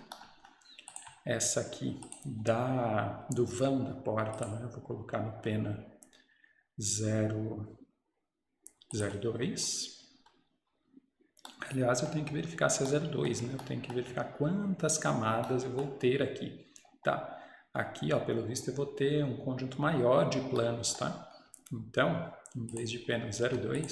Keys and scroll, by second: 10.1 Escape, 23.5 Escape.